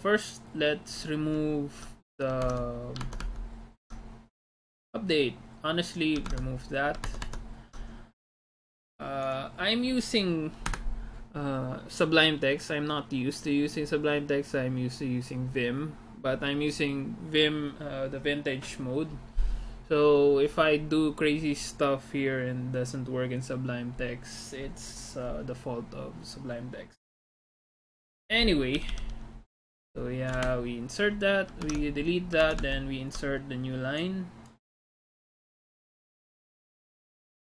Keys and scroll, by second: 2.6 alt+Tab, 3.1 alt+Tab, 6.3 alt+Tab, 7.1 alt+Tab, 10.8 Escape, 28.8 d, 30.4 shift+o, 31.8 alt+Tab, 32.5 alt+Tab.